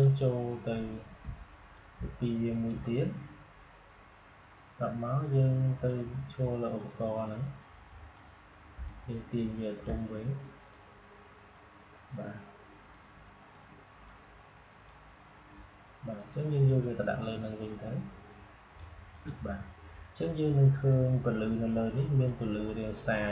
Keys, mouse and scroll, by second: 1.7-5.0 alt+drag, 5.8-8.8 drag, 8.8-19.0 alt+shift+drag, 22.2 click.